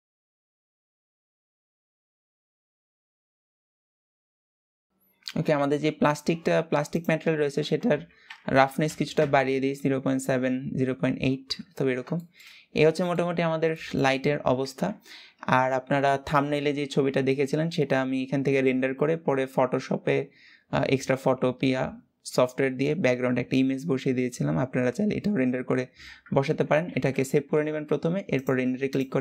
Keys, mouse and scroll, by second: 0.0-2.1 middle drag, 2.1-3.2 drag, 8.8 click, 11.2-11.9 scroll down 2, 11.9-12.2 shift+middle drag, 12.2-12.6 scroll down 3, 12.6-13.1 shift+middle drag, 13.1-13.4 scroll down 1, 13.4-14.3 shift+middle drag, 14.3 ctrl+s.